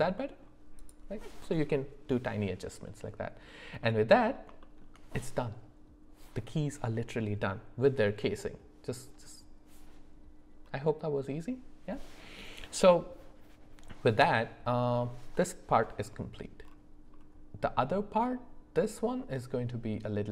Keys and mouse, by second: 0.1 middle click, 0.8 click, 3.8 middle click, 4.6 shift+middle click.